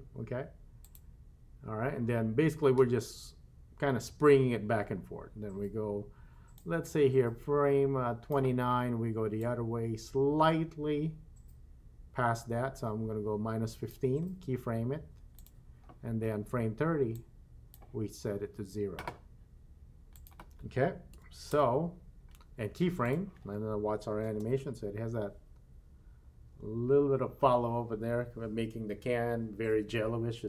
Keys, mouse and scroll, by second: 0.8 click, 6.6-8.4 drag, 9.4-14.0 drag, 15.4 click, 17.2-17.8 drag, 20.1-21.6 drag, 23.0 click, 24.3 space.